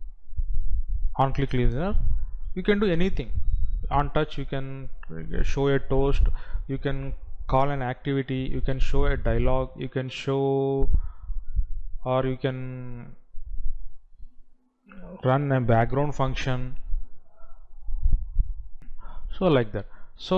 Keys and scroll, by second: 18.9 F9.